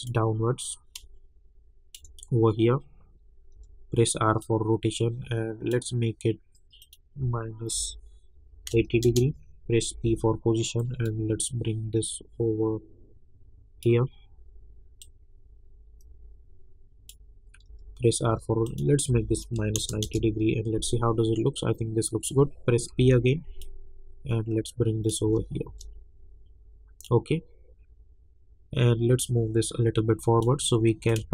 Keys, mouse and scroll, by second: 3.5 r, 4.4-6.8 drag, 9.0 Return, 9.9 p, 10.8-17.6 drag, 17.6 r, 18.6 click, 19.1 -, 20.0 Return, 22.9 p, 23.6-25.2 drag, 25.2 space, 27.0-31.3 drag.